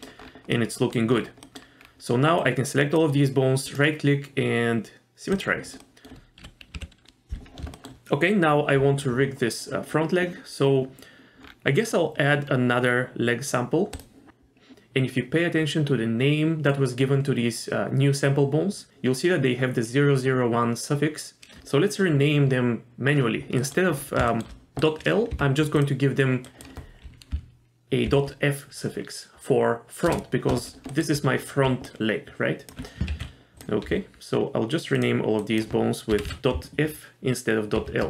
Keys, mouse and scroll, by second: 0.2-0.9 scroll down 2, 0.5 middle click, 1.1-1.6 scroll down 2, 1.4 middle click, 1.8-2.4 scroll up 1, 2.4 click, 3.7-5.4 right drag, 5.8 middle click, 6.4 KP_2, 6.7 KP_1, 7.7 shift+middle click, 11.4-12.0 scroll down 2, 12.5-13.9 scroll down 3, 13.9 click, 13.9 scroll down 1, 23.6 middle click, 23.9-24.3 scroll up 2, 24.3 shift+middle click, 24.8 click, 25.3 F2, 30.9 middle click, 31.1 scroll down 2, 31.6 d, 31.9 click, 32.7 d, 33.1 ctrl+z, 33.5 click, 33.5 scroll up 1, 33.9 F2, 36.2 BackSpace.